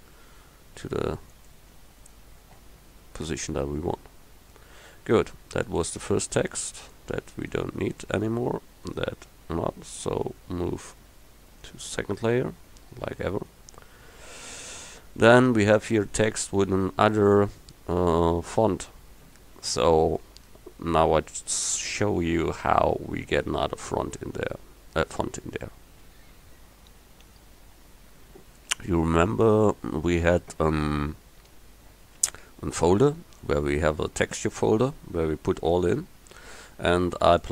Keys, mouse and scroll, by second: 8.1 middle click, 10.6 m.